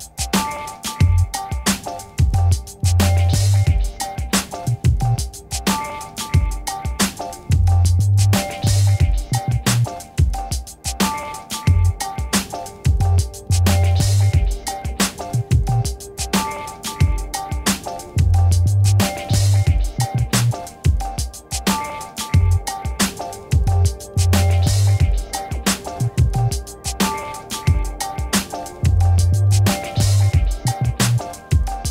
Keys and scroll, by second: 0.0 ctrl++, 0.6 space, 20.0 5, 23.7 5, 24.6 Return, 29.2 ctrl+t.